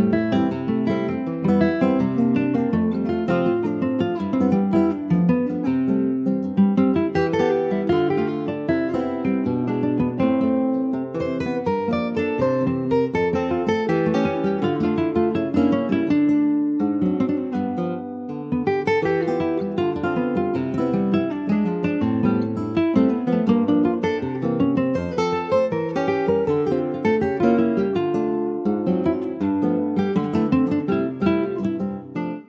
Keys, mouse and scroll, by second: 0.8 click, 1.3 click, 2.3 click, 3.2 scroll down 2, 3.4-4.4 middle drag, 4.4 Tab, 4.6 click, 4.8 scroll down 3, 5.1 shift+middle click, 5.5-5.9 scroll up 1, 5.9 ctrl+s, 6.2 click, 6.5-9.8 right drag, 9.8 click, 10.1 click, 10.4 middle click, 10.9 ctrl+s, 11.0 click, 11.3 middle click, 11.7-12.0 scroll up 2, 12.0 ctrl+s, 12.3-13.5 middle drag, 13.5 click, 13.8 Tab, 14.0 scroll up 2, 14.3 shift+middle click, 15.2 3, 15.4 click, 15.8 shift+click, 16.7 shift+click, 17.1 middle click, 17.5 ctrl+s, 17.7-21.6 shift+middle drag, 21.6 e, 23.3 click, 24.5-25.5 middle drag, 25.5 click, 25.9-28.0 middle drag, 28.0 e, 30.5-31.6 middle drag, 31.6 2, 31.8 click, 32.2 middle click.